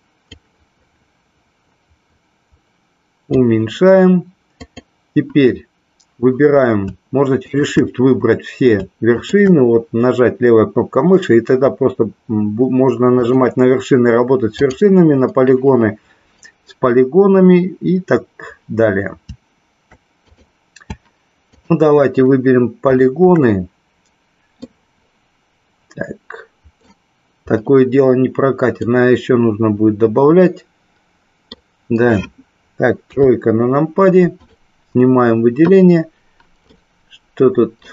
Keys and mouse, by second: 0.4-3.4 drag, 4.6 click, 7.4 shift+click, 9.1 shift+click, 14.5 click, 22.8 shift+click, 24.6-26.9 middle drag, 28.9-31.5 middle drag, 33.0 KP_3, 34.3 click, 36.8-37.9 middle drag.